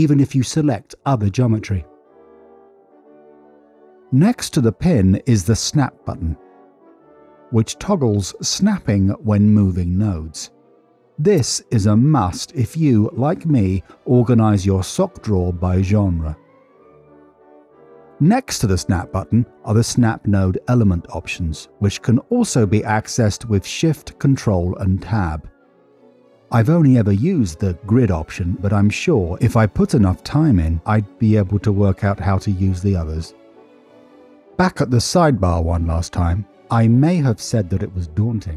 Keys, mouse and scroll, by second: 3.0 middle click, 3.7 middle click, 5.8 click, 7.7 click, 8.2 g, 9.3 click, 9.8 click, 9.9 g, 10.4 click, 11.4 click, 11.6 g, 12.7 click, 14.1 click, 14.2 g, 16.6 middle click, 17.3 middle click, 20.2-23.8 drag, 24.4 ctrl+shift+Tab, 25.9 typing, 27.5 click, 29.1 click, 29.4 click, 31.5 click, 32.3 click, 32.8 click, 33.8 click, 35.9 n, 36.6 middle click, 37.4 middle click.